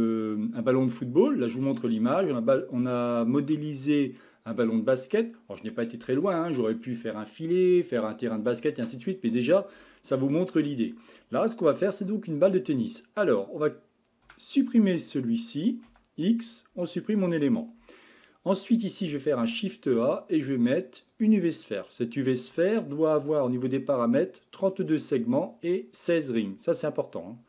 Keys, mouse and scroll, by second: 15.1 click, 15.9 x, 19.4 shift+a, 23.2-26.4 drag, 27.3-27.4 scroll up 6.